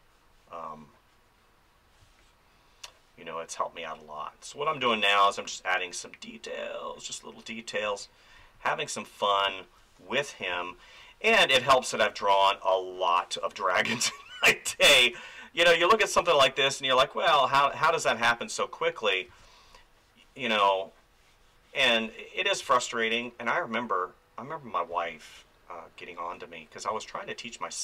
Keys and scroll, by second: 2.0 space, 4.8 space, 7.8 space, 10.5 space, 13.7 space, 17.5 space, 19.3 space, 21.9 space, 24.9 space, 26.9 space.